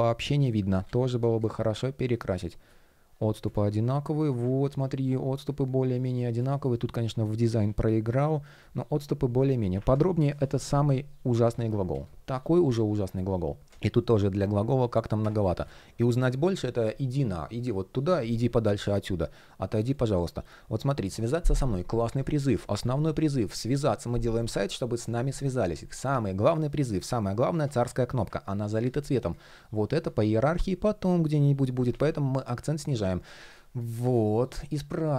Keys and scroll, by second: 6.2 shift+p, 11.2 super+z, 13.6 shift+p, 14.9 super+z, 26.9 shift+p, 28.4 super+z, 31.5 super+z.